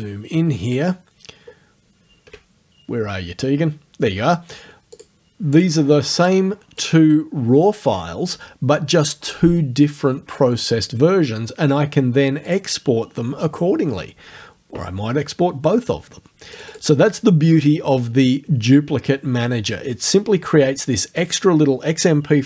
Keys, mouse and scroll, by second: 0.9 ctrl+scroll up 2, 4.9 click, 5.6 click, 6.2 click, 6.8 click, 12.5 click, 16.6 click.